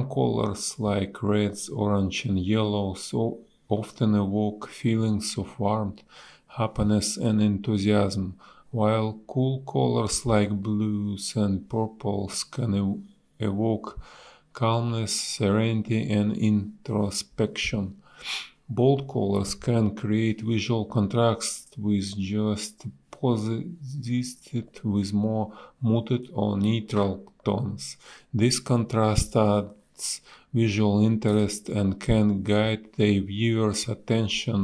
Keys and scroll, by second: 0.1 a, 1.3 space, 2.2 space, 4.4 space, 10.1 space, 10.6 b, 13.6 ctrl+z, 15.6 ctrl+z, 18.2 space, 20.4 space, 21.2 a, 22.1 space, 22.6 b, 25.4 space, 33.1 a.